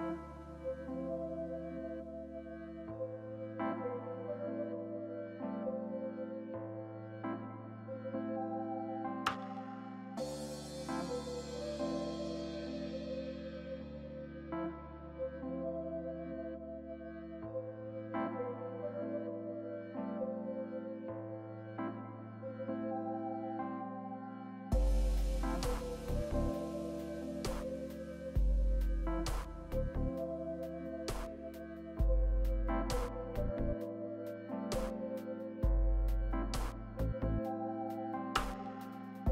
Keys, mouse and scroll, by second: 13.4 right click, 17.2 double click, 20.3 middle click, 20.5-21.8 typing, 21.8 scroll, 21.8-25.4 scroll up 6.